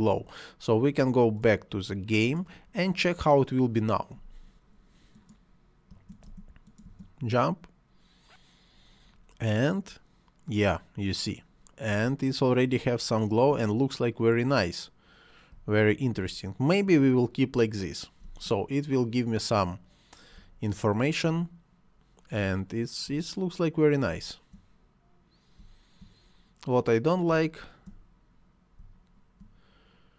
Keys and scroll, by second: 5.9 space, 11.9 space, 15.5 space, 18.2 space, 20.3 space, 22.6 space, 25.6 space, 27.3 space.